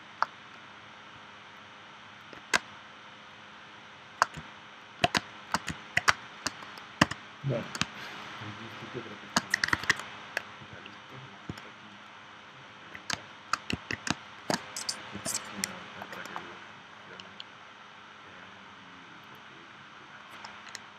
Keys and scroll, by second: 2.6 space, 5.2 space, 6.1 space, 7.0 v, 7.8 space, 9.7 super+s, 13.1 space, 14.1 space, 15.1 p.